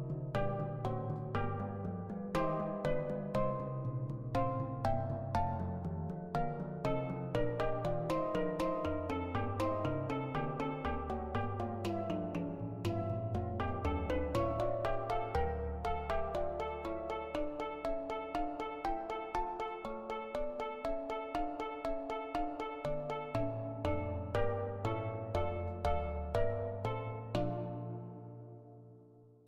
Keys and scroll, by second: 5.3 ctrl+z, 6.3 ctrl+z, 26.0 ctrl+z.